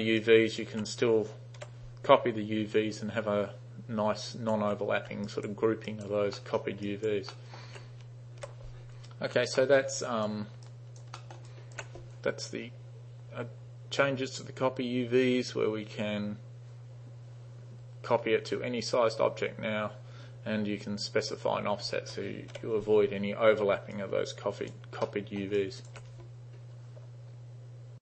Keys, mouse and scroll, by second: 0.3 alt+right click, 1.7 u, 4.4 alt+right click, 5.4 alt+right click, 6.0 alt+right click, 6.4 alt+middle drag, 7.0 alt+right click, 7.4 alt+middle drag, 8.5 u, 9.2 alt+right click, 9.6 alt+middle drag, 10.0 alt+right click, 10.7 alt+right click, 11.2 alt+middle click, 11.6 alt+click, 22.6 u, 24.0-24.8 alt+right drag, 25.1-25.4 alt+middle drag, 25.6 alt+right click, 27.2 click.